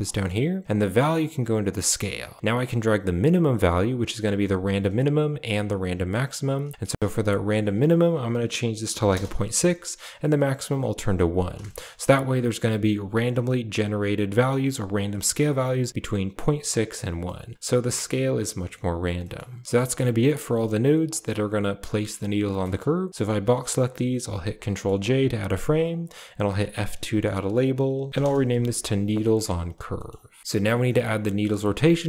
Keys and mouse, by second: 0.0 middle click, 0.6 click, 2.5-4.9 shift+drag, 5.4-6.5 shift+drag, 7.3-9.0 drag, 10.1 click, 11.5 shift+middle drag, 15.1 shift+middle click, 17.1-17.5 shift+middle drag, 18.4 middle click, 19.0 middle click, 19.6 g, 19.8 a, 20.2-20.6 drag, 20.8 g, 22.3 middle click, 23.1-23.6 drag, 24.3 ctrl+j, 24.5 middle click, 24.8 a, 25.7 click, 25.8 click, 26.3 F2, 28.1 e, 28.4 a, 29.1 click, 29.5 a, 29.8 middle click, 30.2 click, 30.4 a, 30.7 click, 31.2 click.